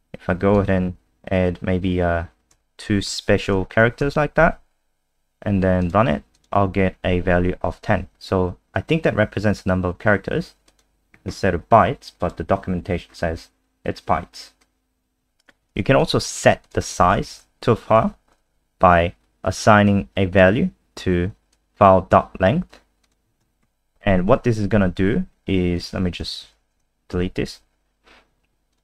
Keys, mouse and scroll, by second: 2.5 &, 3.1 *, 4.0 ctrl+s, 5.8 click, 6.6 F5, 10.7 click, 12.9-14.6 scroll down 2, 14.6 click, 15.7 ctrl+c, 16.0 click, 16.6 shift+click, 17.3 shift+Right, 18.0 ctrl+v, 18.7 click, 23.6 ctrl+s, 25.7 click, 26.4 Home, 26.5 End, 27.1 Delete, 28.7 click.